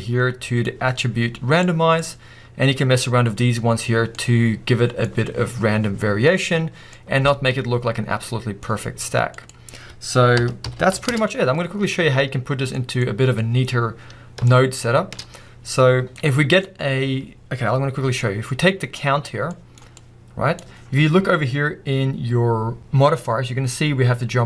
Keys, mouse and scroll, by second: 0.6-8.4 middle drag, 6.2-6.9 scroll down 2, 11.1 0, 11.2 Return, 12.8 middle click, 13.9 scroll up 1, 14.5 shift+middle drag, 14.7 middle click, 14.9 middle click.